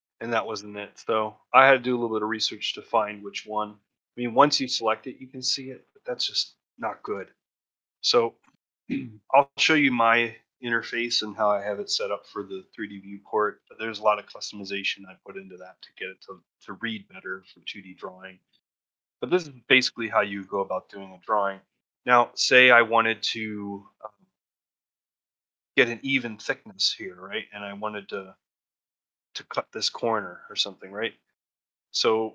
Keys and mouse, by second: 0.0 middle click, 1.6-3.5 middle drag, 4.8 shift+click, 6.7 shift+middle click, 7.0 ctrl+middle click, 13.7 middle click, 14.5 middle click, 15.0 middle click, 15.3 middle click, 18.1 shift+middle click, 19.5 click, 21.1 click, 21.6 shift+middle click, 22.4 shift+middle click, 24.2 ctrl+middle click.